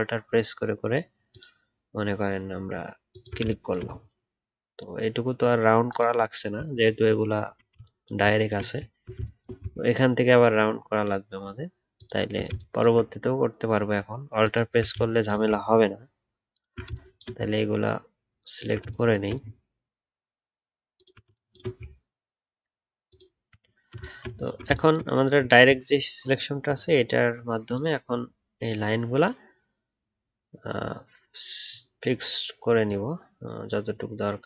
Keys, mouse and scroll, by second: 4.0 alt+scroll up 2, 5.8 alt+click, 6.1 alt+scroll down 1, 6.8 alt+scroll down 1, 6.9 alt+scroll up 4, 7.3-8.2 alt+scroll down 1, 8.9 alt+scroll down 1, 11.9 alt+click, 24.4-24.7 alt+scroll down 3, 25.4 alt+scroll down 1.